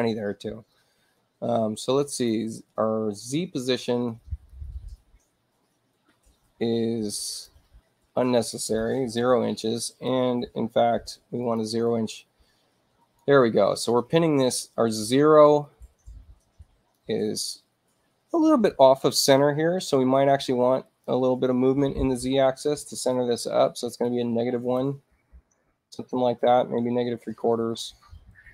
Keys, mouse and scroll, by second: 2.0 click, 4.4-7.4 drag, 8.2 click, 9.2 0, 9.7 click, 10.9 0, 11.4 click, 11.8-13.1 drag, 14.4-16.9 drag, 20.8 click, 22.6 Tab, 23.8 click, 24.4-25.2 typing, 26.4 click, 27.8-28.5 typing.